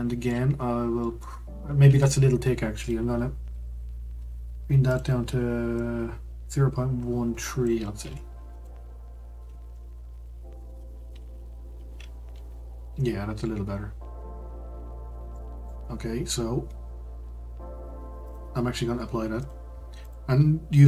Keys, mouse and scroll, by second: 1.4-1.8 scroll up 1, 1.8 Tab, 4.9-8.0 drag, 9.7-12.9 middle drag, 14.0-14.3 scroll down 1, 14.3-14.9 scroll up 2, 14.9-15.3 scroll down 1, 15.3-18.2 middle drag, 18.2-20.1 drag.